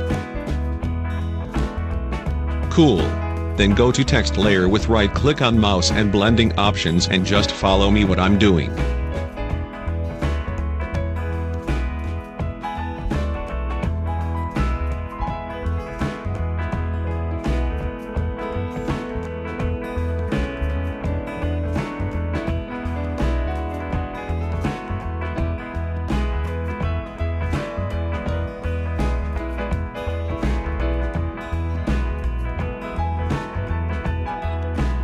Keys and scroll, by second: 9.7 8, 12.6 ctrl+z, 30.2-32.1 typing, 34.0 2.